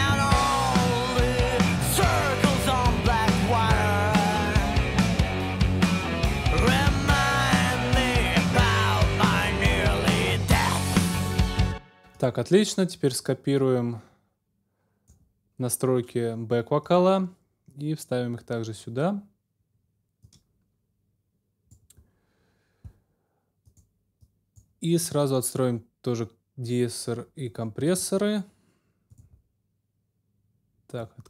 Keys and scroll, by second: 10.6 super+s, 11.4 super+space.